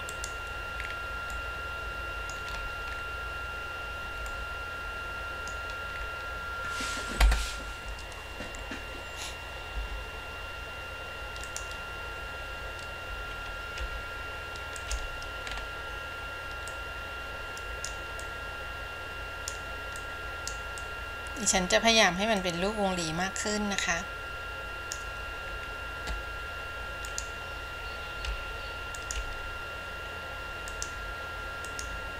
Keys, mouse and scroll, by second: 0.3 click, 1.0 scroll down 3, 1.6-2.6 middle drag, 2.6-4.4 scroll up 5, 4.4-5.7 middle drag, 6.2-9.7 scroll down 2, 11.6 click, 13.9 f, 15.7-16.0 scroll up 3, 16.9-18.1 drag, 18.4-19.7 drag, 20.2-20.8 drag, 21.0 click, 22.6-25.1 drag, 25.6-26.0 scroll down 2, 27.2 click, 28.4 f, 31.8-32.1 drag.